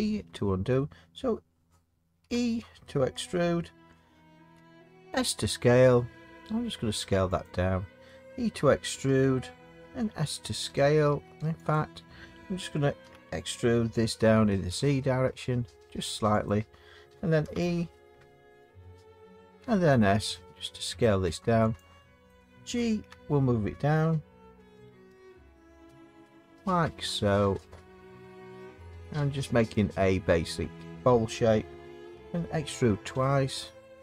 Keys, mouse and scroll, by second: 2.2 e, 4.5 s, 9.1 e, 11.1 s, 11.7 click, 13.0 e, 14.7 z, 16.5 click, 17.4 e, 19.6 s, 21.8 click, 22.9 g, 25.1 z, 29.7 click, 32.1 e, 33.1 s.